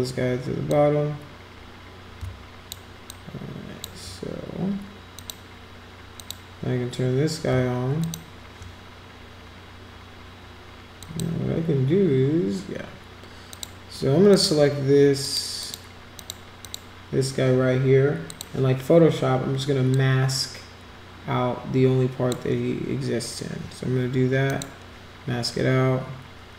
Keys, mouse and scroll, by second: 0.7-2.7 drag, 3.0-3.8 shift+drag, 5.2 click, 6.1 click, 8.0 shift+click, 11.0 click, 13.5 click, 14.3 click, 15.2 click, 15.6 click, 16.2 click, 16.6 click, 18.3 click, 19.9-22.3 drag, 24.5 click.